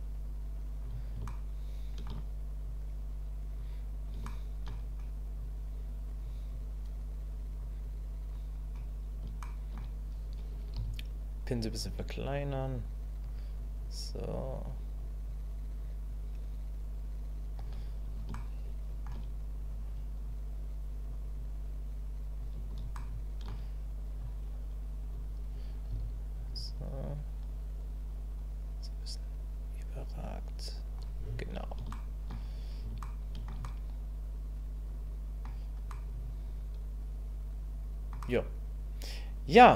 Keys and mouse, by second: 1.3 shift+click, 2.7 click, 4.3 shift+click, 5.4 click, 6.5-7.6 drag, 7.8 click, 9.4 shift+middle click, 12.2 click, 13.6 click, 14.2 click, 15.2 click, 16.1-17.6 drag, 18.4 shift+middle click, 20.3 click, 21.4-22.4 drag, 23.0 shift+middle click, 24.3 click, 27.0-30.9 drag, 31.9 shift+middle click, 33.1 shift+middle click, 33.6-35.4 middle drag, 35.9-38.1 middle drag, 38.2-39.6 middle drag.